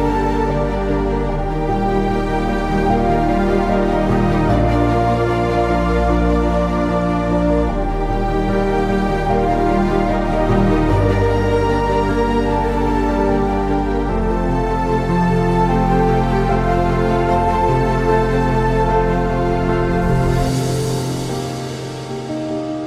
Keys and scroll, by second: 0.6 typing, 1.6 ctrl+Print, 6.1 ctrl+Print, 6.1 /, 7.2-13.2 typing, 14.3 typing, 20.0-21.7 typing.